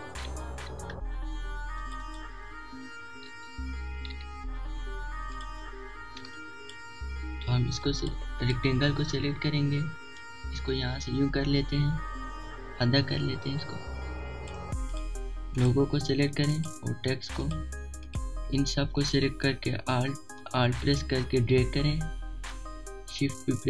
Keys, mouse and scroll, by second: 0.8 4, 1.1 Return, 1.5 click, 1.9 alt+scroll down 1, 2.1 click, 2.8 alt+shift+click, 3.5 click, 3.8 shift+click, 4.1-5.3 alt+shift+drag, 4.4 typing, 5.3 alt+scroll up 1, 5.4-6.8 drag, 6.8 click, 7.9 alt+scroll down 1, 8.1 click, 8.3 alt+scroll up 1, 8.5-11.6 drag, 11.6 click, 12.5 shift+click, 13.6 alt+shift+click, 14.5 click, 15.8 shift+click, 17.0 typing, 18.7-23.6 alt+drag, 23.0-23.6 typing.